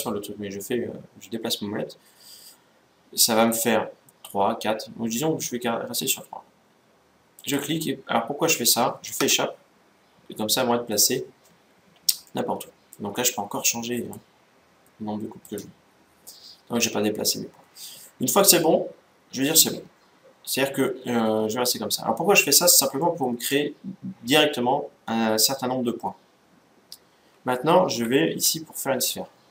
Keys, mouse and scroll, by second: 12.0-13.7 middle drag, 13.7-16.8 drag, 16.0-17.7 middle drag, 18.2-19.9 middle drag, 22.7-24.4 middle drag.